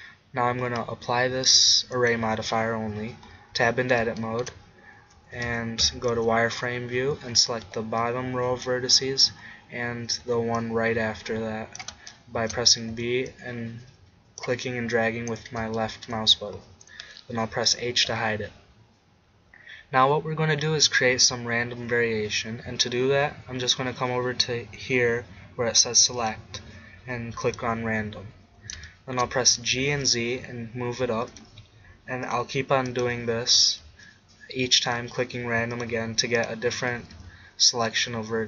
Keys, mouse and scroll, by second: 1.4 middle click, 2.0-3.4 drag, 3.6 Tab, 5.2 a, 5.5 a, 5.9 a, 6.2 z, 7.7 b, 10.3 b, 12.9 b, 17.6-19.2 middle drag, 17.8 h, 28.0-29.1 middle drag, 29.5 g, 31.3 middle click, 33.6 g, 34.1 click, 37.0 g, 37.6 click.